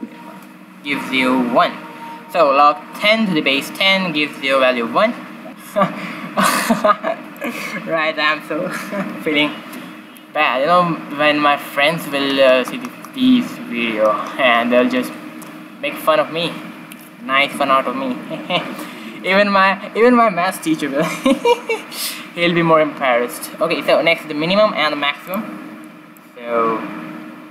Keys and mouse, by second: 7.3-9.2 drag, 26.1-27.5 drag.